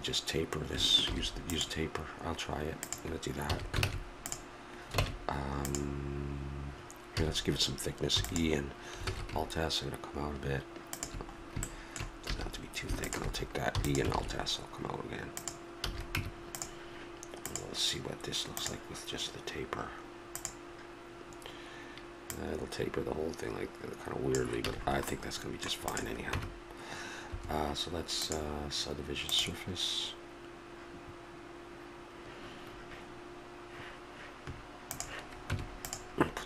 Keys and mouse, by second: 1.0 ctrl+r, 3.4 a, 3.8 ctrl+Tab, 7.1 a, 9.0 alt+s, 12.3 a, 13.0 right click, 13.8-15.0 drag, 14.1 alt+s, 15.8 a, 16.2 Tab, 17.4-18.6 drag, 20.3-24.2 drag, 24.7 a, 24.8-25.9 middle drag, 25.9 click, 26.3 Tab, 28.2-30.1 drag, 34.9-36.2 drag, 35.5 Tab.